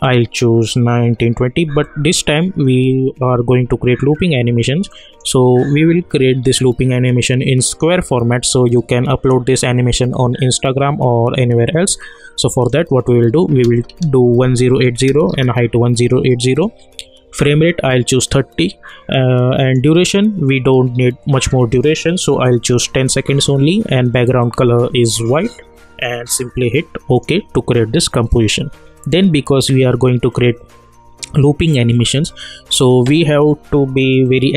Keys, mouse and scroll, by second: 0.0-4.6 drag, 4.9 click, 12.5-14.7 drag, 19.6 click, 27.1 click.